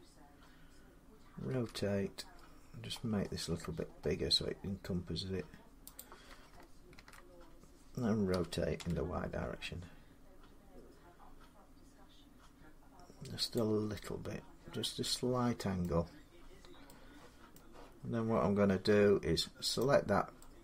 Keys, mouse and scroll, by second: 1.3 r, 2.1 scroll up 7, 2.4-2.8 scroll, 2.8-4.0 scroll down 25, 4.9-5.7 scroll, 5.8 click, 6.8 ctrl+z, 8.1-8.6 typing, 8.8 middle click, 11.0 click, 13.4 click, 15.6 middle click, 17.4 middle click, 18.7 Tab, 19.6 click.